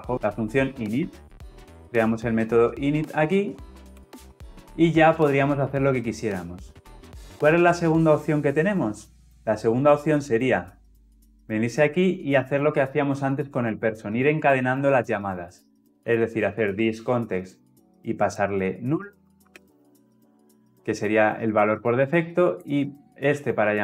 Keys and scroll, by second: 0.1 Escape, 3.8 alt+Return, 9.1 ctrl+z, 9.8 ctrl+z, 10.4 ctrl+z.